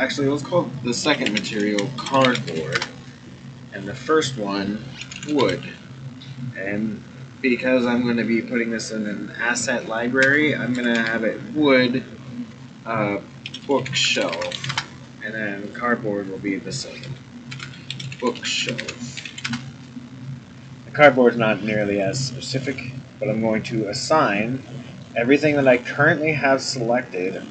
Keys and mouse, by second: 3.7 click, 4.0-15.4 drag, 5.3 o, 13.7 o, 15.6 click, 15.9-20.9 drag, 18.1 o, 21.8 middle click, 24.6 middle click, 25.5 middle click, 27.2 middle click.